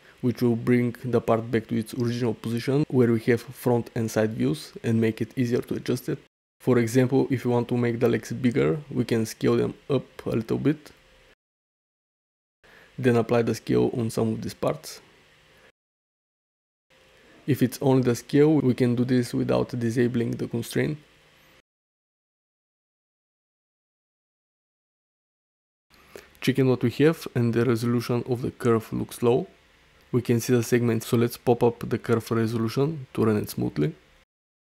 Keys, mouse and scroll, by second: 0.3 middle drag, 3.0-4.9 drag, 5.8 shift+click, 6.4-6.8 middle drag, 7.2 middle click, 8.2 s, 8.5 1, 8.9 ., 9.2 1, 10.4 Return, 11.5-11.9 shift+middle drag, 12.7 middle click, 13.9 shift+click, 14.7 ctrl+a, 16.6 click, 18.7 s, 18.9 1, 19.1 ., 19.3 1, 19.8 Return, 20.4 `, 21.2 drag, 22.5 shift+click, 22.8 ctrl+a, 24.2 middle drag, 24.9 ctrl+alt+middle drag, 25.2 alt+middle click, 25.6 ctrl+alt+middle drag, 25.9 alt+shift+middle drag, 26.3-28.7 alt+middle drag, 29.0-29.3 ctrl+alt+middle drag, 29.4 alt+shift+middle drag, 29.8 alt+middle drag, 31.3 alt+middle drag, 34.2-34.6 drag.